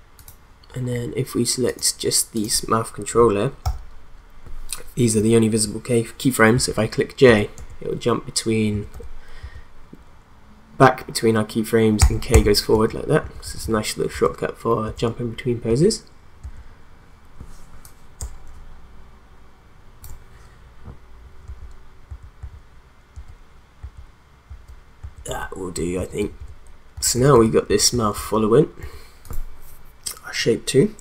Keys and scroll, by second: 3.6 u, 6.5 j, 7.2 k, 8.7 j, 9.5 j, 12.0 k, 12.8 k, 13.2 j, 14.1 k, 15.7 j, 16.4 k, 21.4 k, 22.1 j, 23.1-27.9 typing, 28.9 k.